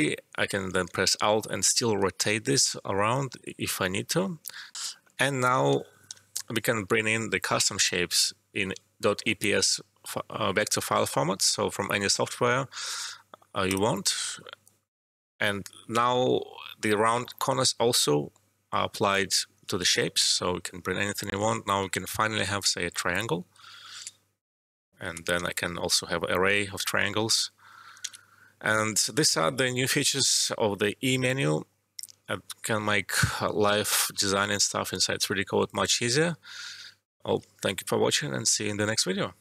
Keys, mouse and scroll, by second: 4.7 alt+F12, 5.2 alt+middle click, 6.0 e, 8.0 click, 13.6-19.6 drag, 19.6 space, 21.8 ctrl+z, 22.5 click, 25.3 4, 28.0 ctrl+z, 31.0 e, 36.9 alt+Num_Lock, 37.0 alt+middle click.